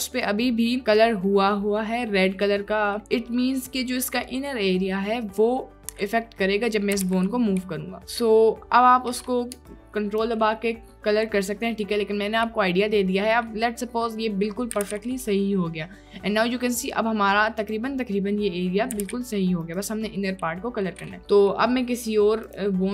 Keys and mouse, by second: 0.5-1.2 middle drag, 2.6 middle click, 3.8 middle click, 7.0 r, 7.2 y, 11.5 middle click, 14.1 middle click, 14.8 r, 14.9 y, 19.0 r, 19.1 y.